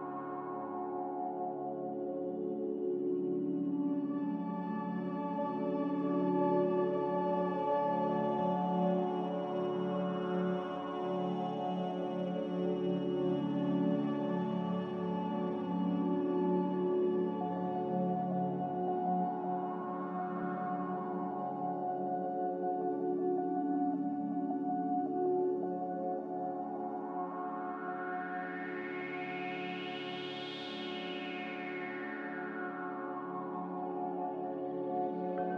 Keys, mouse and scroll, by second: 17.2 z, 29.3 Delete, 34.3 Delete.